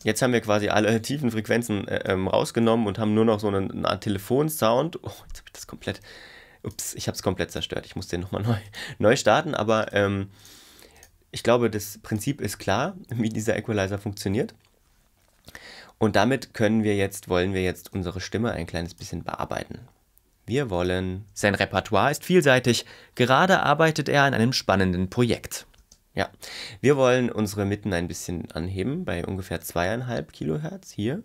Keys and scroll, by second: 21.3 space, 25.8 space.